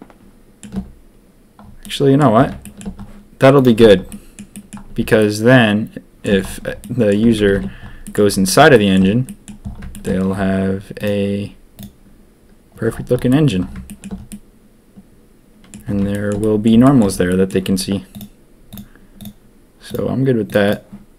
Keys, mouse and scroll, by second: 1.8 middle drag, 2.0 click, 2.0 middle drag, 2.6 shift+middle drag, 3.5 click, 3.8 Tab, 4.1 middle click, 4.5 click, 5.2-6.2 shift+drag, 6.8 click, 7.2 Tab, 7.4 a, 7.5 a, 8.0 middle click, 8.7 shift+middle drag, 9.2 middle drag, 9.9 shift+middle click, 10.9-13.3 drag, 13.3 middle drag, 13.8 shift+middle drag, 14.3-15.6 drag, 16.1 shift+drag, 16.4 drag, 16.8 shift+click, 17.2 middle click.